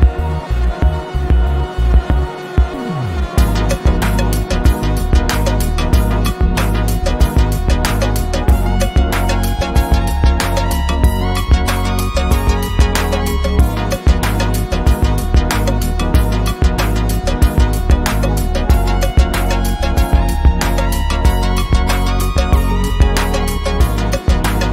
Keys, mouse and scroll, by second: 0.1 ctrl+z, 1.2 ctrl+shift+], 2.9 click, 3.7 ctrl+z, 4.3 ctrl+shift+[, 6.1 click, 7.5 right click, 9.0 Escape, 10.0 ctrl+shift+], 11.1 click, 14.1 ctrl+z, 15.5 click, 21.4-24.5 drag.